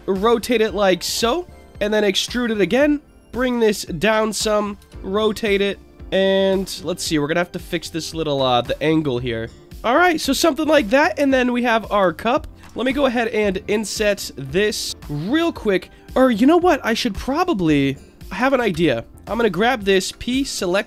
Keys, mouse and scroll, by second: 1.6 click, 1.8 e, 2.6 click, 3.1-4.2 drag, 4.8 r, 5.9 click, 8.7 click, 9.6 Tab, 9.6 middle click, 9.6 click, 9.6 s, 10.1-11.1 scroll down 2, 10.6-11.3 middle drag, 11.6-12.0 scroll up 3, 12.1 shift+middle drag, 12.6 Tab, 13.4 click, 14.9 click, 15.5 click, 15.8-16.3 scroll up 2, 16.3 scroll down 1, 16.4-18.1 scroll down 1, 18.3 ctrl+KP_Add, 19.0 ctrl+KP_Add, 20.5 Tab, 20.5 p.